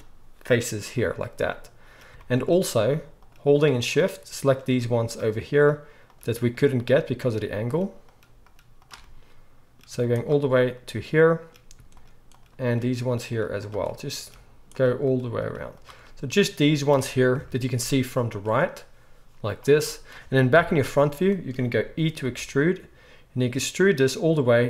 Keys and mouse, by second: 3.2-5.5 shift+middle drag, 5.5 shift+click, 5.6 shift+middle click, 6.5 shift+click, 7.3 shift+middle click, 8.0 shift+click, 8.1 shift+middle click, 8.4 shift+click, 8.5 shift+middle click, 8.7 shift+click, 8.9-10.1 middle drag, 10.1 shift+click, 10.4-11.9 middle drag, 11.9 shift+click, 12.3 shift+middle click, 12.9 shift+click, 13.0 shift+middle click, 13.5 shift+click, 13.6-14.7 shift+middle drag, 14.7 shift+click, 15.1-24.6 shift+middle drag, 17.3 KP_3, 17.9 z, 20.6 KP_1, 22.2 e.